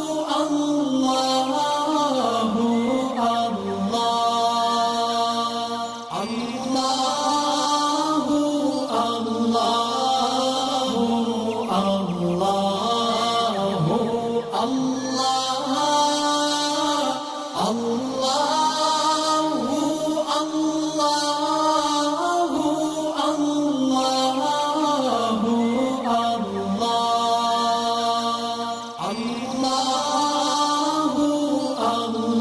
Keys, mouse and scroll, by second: 6.0-7.2 drag, 8.8-9.5 drag, 10.6-11.3 drag, 12.1-12.8 drag, 14.9 alt+scroll up 1, 15.7 click, 16.3 alt+scroll up 1, 18.8 click, 21.8 click, 23.6 alt+scroll up 1, 24.9 ctrl+z, 25.6 click, 26.1 alt+scroll down 1, 28.1 click, 30.3 click, 31.1-31.6 alt+scroll up 2.